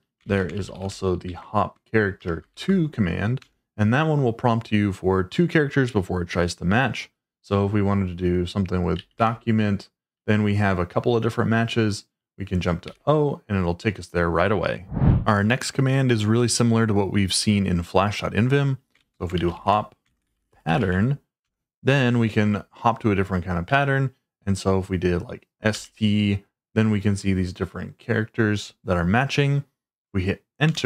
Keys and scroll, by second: 0.0-2.6 typing, 3.4 Return, 8.7-9.6 typing, 12.8 o, 18.7-21.2 typing, 21.4 Return, 23.6 s, 25.7 t, 30.6 Return.